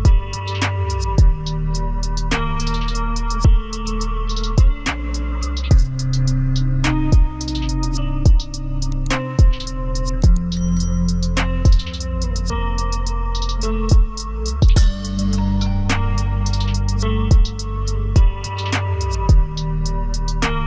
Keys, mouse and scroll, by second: 1.1 z, 2.6 z, 2.9 ctrl+space, 3.2 ctrl+click, 3.5 scroll down 1, 5.5 double click, 7.0 shift+click, 7.3 c, 8.1 double click, 8.5 scroll up 1, 11.4 scroll down 1, 12.0 z, 13.2 z, 13.5 ctrl+space, 14.2 double click, 15.6 shift+click, 15.9 c, 17.2 double click.